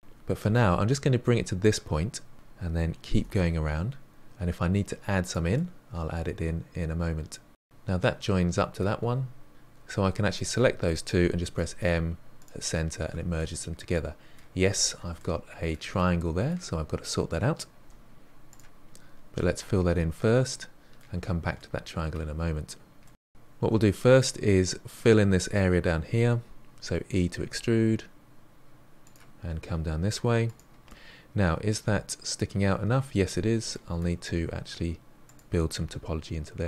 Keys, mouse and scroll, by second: 0.2 g, 2.0-3.0 middle drag, 3.0 e, 4.8-7.1 middle drag, 10.2 shift+drag, 11.4 m, 13.3-14.5 middle drag, 14.5-15.1 scroll up 2, 15.1-17.8 shift+middle drag, 17.8 2, 18.4 click, 19.3 f, 19.8 f, 20.4-22.5 middle drag, 22.5-23.0 scroll down 2, 23.0 middle click, 23.6 1, 24.1 click, 27.4 e, 29.3 e, 30.8-34.3 middle drag, 34.3 e, 35.8 e.